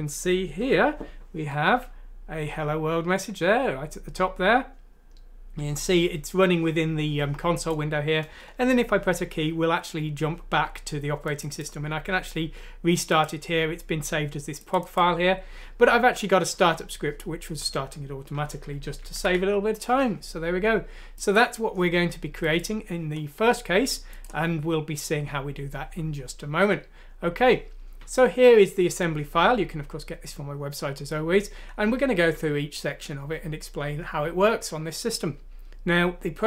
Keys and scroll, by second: 8.3 space, 19.2 ctrl+End.